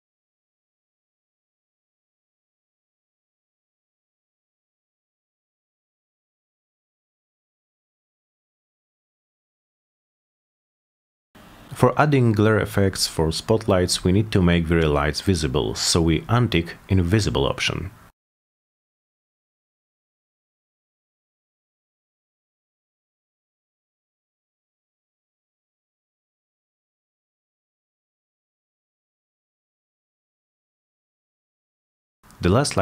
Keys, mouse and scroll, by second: 1.2 click, 1.6-3.0 drag, 3.3 click, 3.6 Return, 4.6 click, 5.2-6.0 drag, 6.2 click, 6.8 Return, 7.2 click, 8.3 click, 8.8 BackSpace, 9.1 Return, 10.7 click, 11.4 Return, 12.2 click, 12.3 drag, 13.2 click, 14.1 click, 14.3 click, 15.4 click, 16.4 click, 17.1 middle click, 17.3 middle drag, 18.7 click, 18.9 middle click, 19.1 middle drag, 19.8 click, 19.9 click, 20.8 middle click, 21.8 click, 23.1 Return, 23.9-24.6 drag, 24.9 click, 25.7 middle click, 26.6 middle click, 27.1 click, 27.6 middle click, 28.7 click, 29.0 click, 31.7 click.